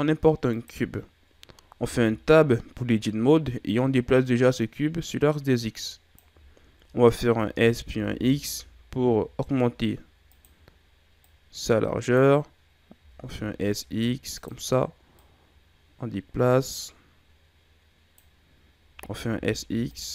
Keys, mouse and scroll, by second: 1.8 Tab, 3.6 click, 6.4-7.2 scroll up 3, 7.2 s, 11.2 click, 12.9 s, 15.1 click, 18.8 s.